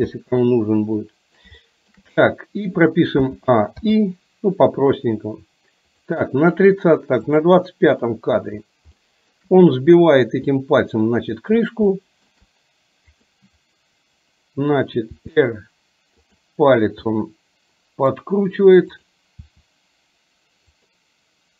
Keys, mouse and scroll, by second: 1.0-1.5 middle drag, 1.7-2.0 shift+middle drag, 3.3 a, 3.9 i, 7.5 click, 8.0 middle click, 9.2 shift+middle drag, 10.7-11.4 middle drag, 12.0 shift+middle drag, 15.3 r, 17.2-18.3 middle drag, 19.2 click, 19.5 r.